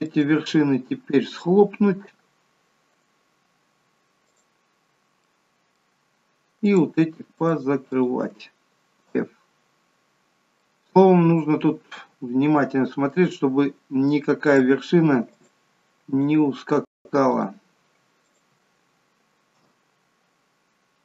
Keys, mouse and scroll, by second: 0.1 shift+click, 2.9 right click, 5.3 middle click, 6.7 click, 7.4 shift+click, 7.9 shift+click, 9.2 f, 10.3 scroll down 2, 10.6 middle click, 13.7-14.6 scroll up 1, 14.6 click, 15.4 shift+click, 16.1 click, 17.2 click, 18.1 shift+click, 19.5 f.